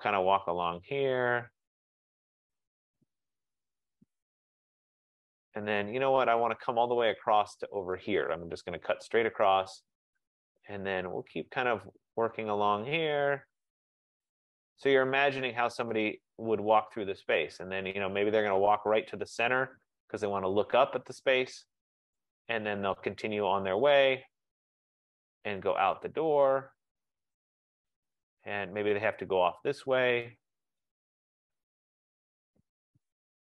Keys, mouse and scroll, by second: 0.7 click, 3.7 click, 5.2 click, 8.5 click, 12.3 click, 14.3 click, 18.2 click, 20.3 click, 22.4 F15, 23.9 click, 25.7 click, 27.7 click, 30.9 click, 33.2 click.